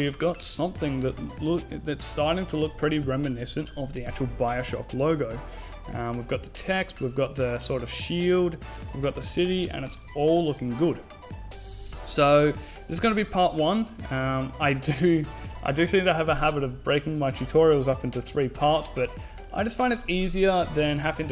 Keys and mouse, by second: 0.6 middle click, 1.8 KP_5, 2.8-4.7 middle drag, 5.1 middle click, 6.2-8.9 right drag, 8.9-11.9 middle drag, 9.1 a.